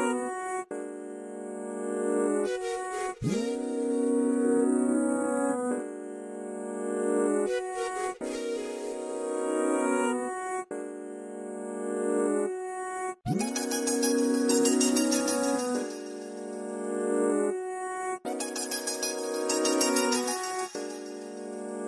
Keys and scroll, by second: 3.9-4.7 typing, 15.6-17.6 typing.